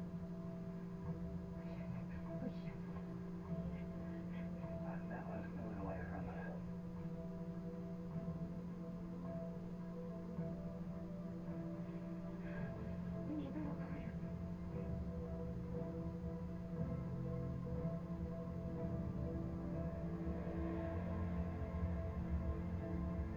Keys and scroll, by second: 15.0 Up.